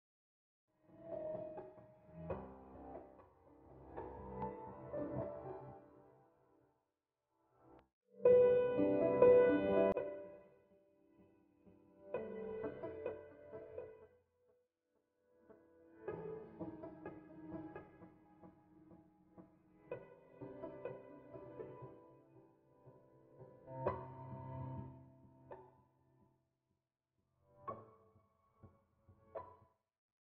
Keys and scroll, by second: 0.2 Return, 2.1 Escape, 2.6 Escape, 4.5 2, 4.8 Return, 6.2 Escape, 8.6 o, 9.5 Escape, 13.3 Escape, 14.0 o, 14.8 Escape, 19.5 Escape, 24.2 Escape, 24.5 Return, 27.8 Escape, 28.7 o.